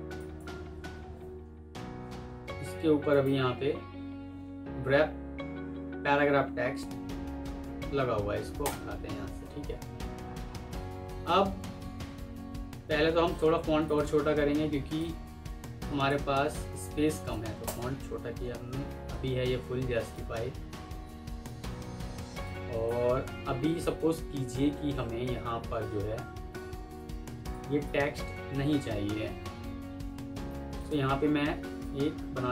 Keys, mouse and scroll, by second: 0.9 ctrl+z, 3.0 right click, 9.8 alt+scroll down 1, 10.1 alt+scroll up 1, 12.5 F3, 17.2 6, 17.5 Return, 21.7 Return, 26.7 F2, 27.8 Escape.